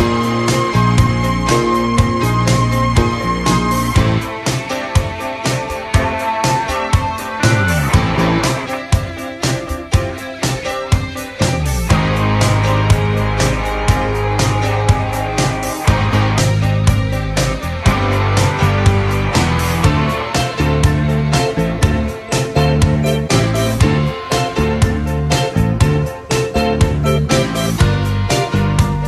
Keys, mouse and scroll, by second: 4.4 Tab, 7.5 KP_1.